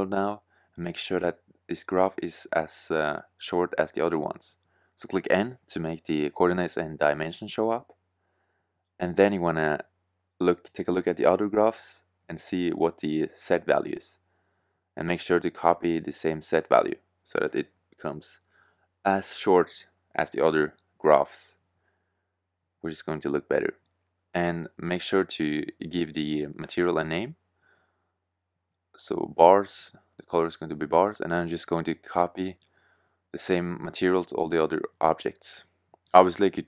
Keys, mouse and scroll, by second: 5.8 n, 13.0-14.6 middle drag, 16.5 click, 18.8 KP_4, 23.5-24.5 drag, 24.7-31.0 middle drag, 33.9 middle drag, 34.6 middle click, 35.2 middle click, 35.6 middle click.